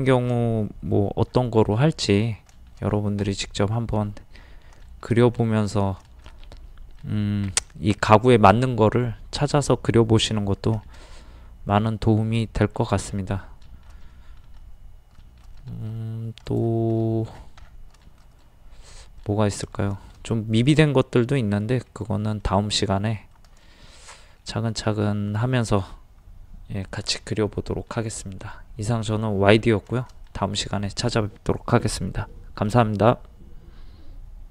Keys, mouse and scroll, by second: 0.1 shift+middle click, 1.3-1.6 scroll down 1, 1.7 middle click, 2.5 shift+middle click, 4.4 scroll down 1, 4.8 shift+middle click, 11.1-22.9 middle drag, 23.6 shift+middle click, 25.1-30.3 shift+middle drag.